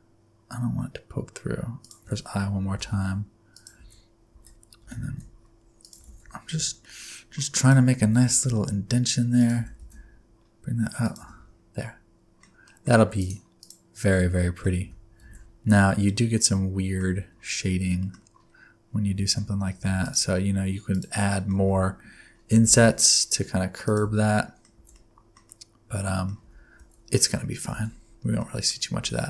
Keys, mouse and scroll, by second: 2.7 i, 3.7 alt+z, 4.3 alt+z, 4.7 g, 6.0 alt+z, 6.5 1, 6.8 middle click, 7.0 scroll up 1, 7.5 alt+click, 8.0 alt+z, 8.2 s, 9.5 g, 11.3 Tab, 11.4-11.7 scroll down 4, 11.7 middle click, 12.6 middle click, 13.1 right click, 14.1 middle click, 14.8 Tab, 15.2 alt+z, 15.7-16.0 scroll up 1, 16.0 middle click, 17.2 alt+z, 17.4-17.9 scroll up 2, 18.0 middle click, 18.1-18.7 scroll up 5, 18.8 scroll down 4, 19.1 alt+z, 19.8 3, 20.0 click, 20.9 click, 21.2 middle click, 21.6 alt+z, 22.7 i, 24.0 alt+z, 24.3 middle click, 24.7 alt+z, 24.9 middle click, 25.4 middle click, 26.4 Tab, 26.7 alt+z, 27.6 alt+z, 27.8-28.9 scroll down 8, 28.7 middle click.